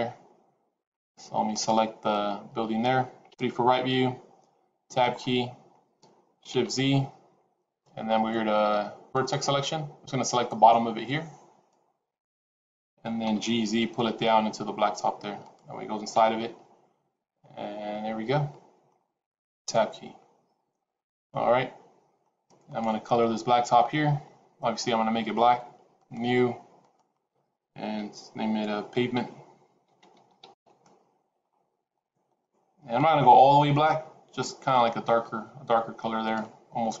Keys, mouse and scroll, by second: 1.4 click, 3.2 KP_3, 4.5 Tab, 5.0-5.6 scroll up 3, 6.8 shift+z, 9.0 click, 10.4 click, 13.2 g, 16.6 shift+z, 17.0 middle click, 19.4 Tab, 20.1-21.2 scroll down 4, 21.2 middle click, 22.6 click, 23.1 middle click, 25.9 click, 26.7 click, 32.2 click, 36.5 scroll down 3, 36.8 middle click.